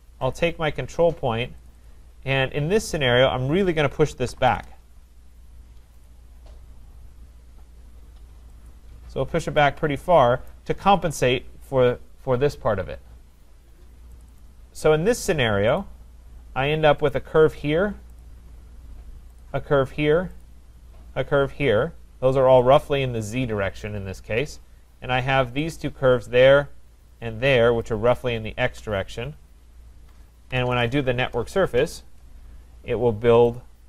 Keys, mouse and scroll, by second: 0.4 click, 1.7 click, 1.9 click, 2.9-3.9 scroll, 3.9-4.9 typing, 3.9 scroll, 5.3 scroll, 6.1 click, 6.1-6.9 scroll, 8.7 click, 10.5 right click, 14.2 click, 14.4 click, 15.3 right click, 15.8 click, 17.1 click, 18.2 click, 19.4 shift+click, 20.5 click, 22.1 click, 22.8 click, 25.7 shift+click, 27.8 shift+click, 30.5-31.7 typing, 33.6 Return, 33.6 click.